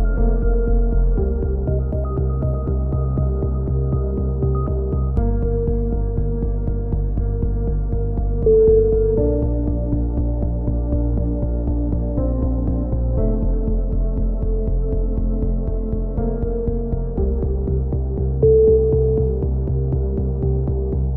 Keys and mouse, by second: 2.4 KP_3, 2.6 z, 3.8 z, 4.2-4.5 drag, 5.0 alt+m, 5.5 a, 5.7 middle click, 5.9 z, 6.0 z, 6.2-7.1 drag, 7.1-9.2 middle drag, 9.2 a, 9.3-11.2 drag, 16.0 ctrl+r, 17.6-20.3 drag, 20.3 z, 20.7 ctrl+l, 20.7-21.1 right drag, 20.9 h.